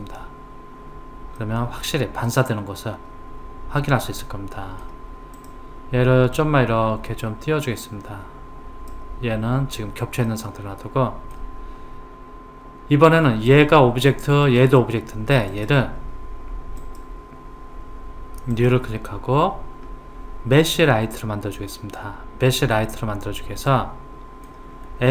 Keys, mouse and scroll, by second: 1.4-4.4 middle drag, 5.4 click, 6.4 click, 10.3-13.3 middle drag, 13.5 click, 14.4 click, 15.5 click, 16.8 click, 18.6 click, 22.8-25.1 middle drag.